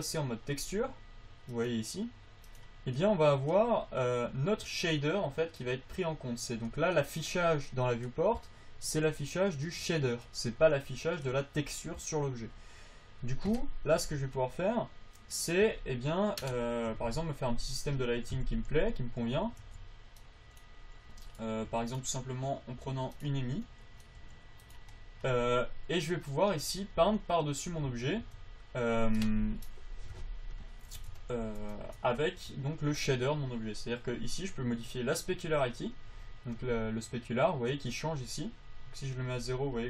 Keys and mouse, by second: 1.8 click, 2.0 click, 2.8 click, 17.2 KP_7, 17.4 KP_5, 18.7 KP_5, 19.1 alt+z, 20.0 alt+z, 22.0 g, 24.0 click, 24.5 g, 28.2 Tab, 28.6 Tab, 34.9-36.9 drag, 39.4-39.8 drag.